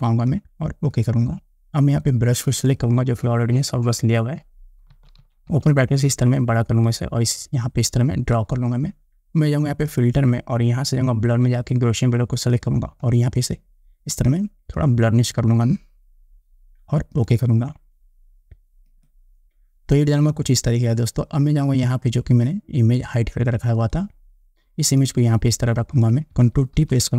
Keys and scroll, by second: 5.1 ], 27.0 ctrl+t.